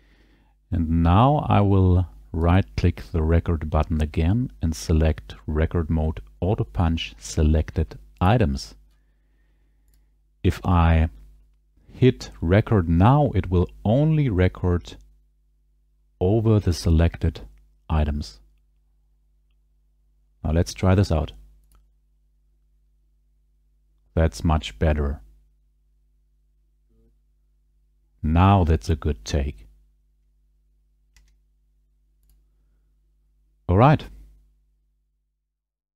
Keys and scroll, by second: 21.6 ctrl+r, 31.2 space.